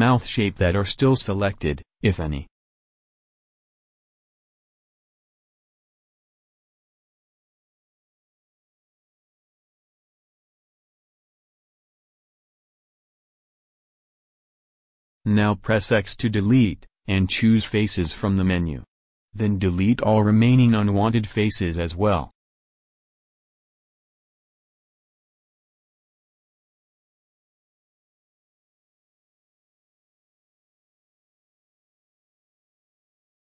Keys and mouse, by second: 9.5 v, 10.9 c, 16.0 x, 24.8 click, 25.2-26.7 middle drag, 29.5-33.5 middle drag, 29.5 c.